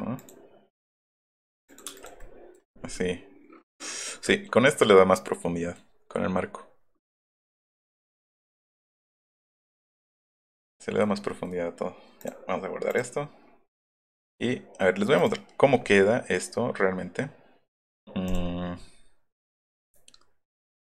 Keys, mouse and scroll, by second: 0.2 click, 1.7 click, 1.9 space, 2.2 middle click, 2.9-5.8 middle drag, 7.1-8.1 middle drag, 12.2 click, 12.9 right click, 13.9 middle click, 15.2 click, 18.3 click, 19.3 click.